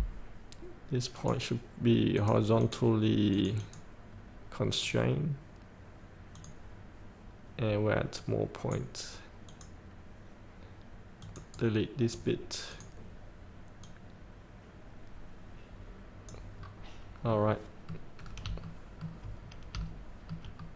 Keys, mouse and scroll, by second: 1.3 click, 8.3 right click, 9.6 click, 11.7-12.9 right drag, 12.9-17.0 drag, 17.0 scroll up 1, 17.4 middle click, 17.9 scroll up 1, 18.5 scroll up 1, 18.8 shift+middle click, 19.5 scroll up 1, 20.1 shift+middle click.